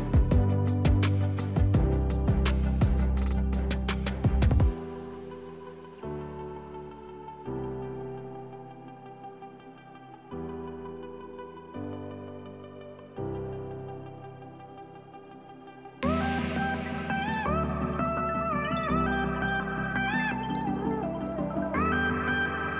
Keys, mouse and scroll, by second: 3.3 click, 6.6 right click, 8.0 click, 13.6 click, 18.5 click, 21.3 Delete, 22.2 click.